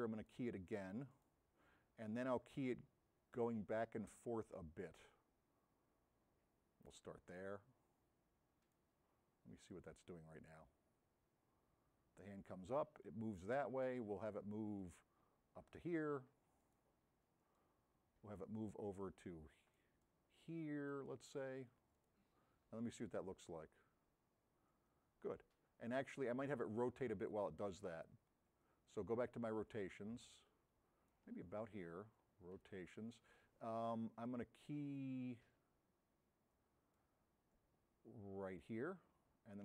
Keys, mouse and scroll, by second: 38.6 click.